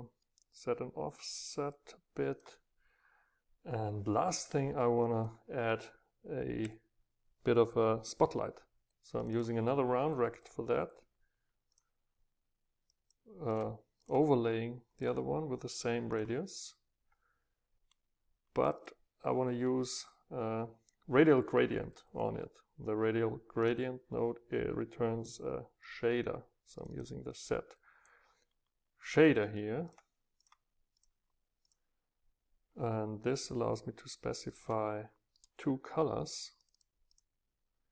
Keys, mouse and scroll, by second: 0.3-1.8 scroll up 4, 1.8-2.3 scroll up 1, 4.3-6.6 drag, 9.2 scroll up 2, 9.3-11.4 drag, 11.8-12.8 drag, 12.8-18.2 middle drag, 18.7-19.9 middle drag, 23.7-25.7 middle drag, 25.9-26.7 middle drag, 26.7 click, 26.8 Up, 26.8 right click, 29.0 Up, 29.0 right click, 30.3 Up, 30.3-33.7 right drag, 34.6-37.9 right drag, 36.5 Up, 37.0 Up.